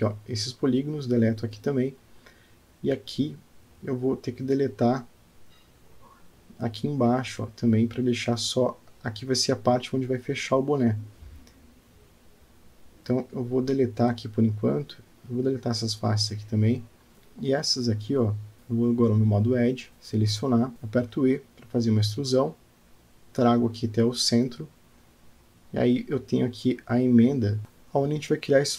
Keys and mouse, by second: 1.4 Tab, 2.5-4.4 middle drag, 5.2 click, 5.6 Tab, 6.1 click, 8.5 x, 16.3 Tab, 17.1 Tab, 17.6 click, 19.8 click, 20.3 click, 21.0 click, 21.2 g, 22.1 e, 26.9 click, 27.5-28.7 middle drag.